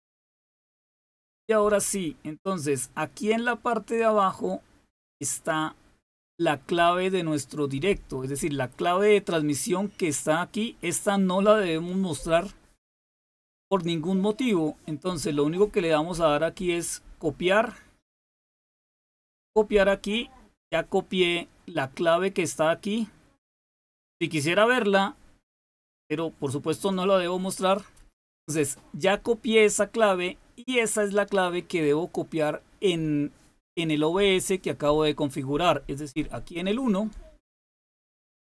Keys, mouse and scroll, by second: 2.8-5.2 drag, 18.3 click, 36.7 click.